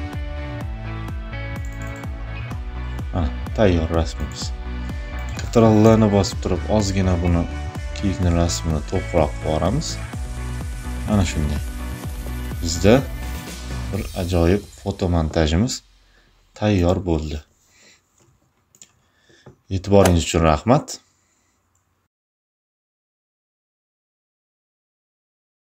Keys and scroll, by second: 5.4 ctrl+l.